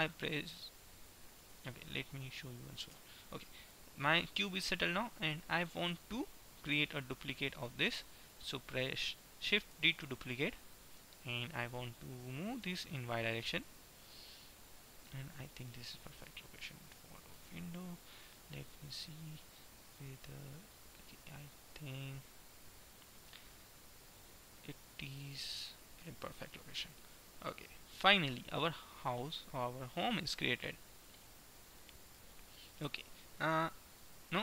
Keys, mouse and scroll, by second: 3.1 ctrl+z, 3.5-5.3 middle drag, 6.0 middle click, 10.0 shift+d, 15.5-17.5 middle drag, 17.6 middle click, 20.1-22.0 drag, 26.0-29.6 middle drag, 32.5-34.4 middle drag.